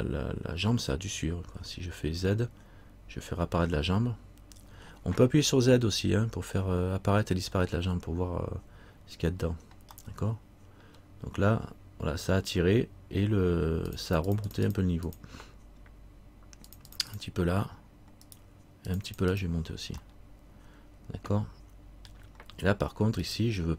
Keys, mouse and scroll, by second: 10.2 middle click, 14.1 click, 14.5 click, 18.4 right click, 19.1 click, 20.3 middle click, 21.8 middle click, 23.4 right click.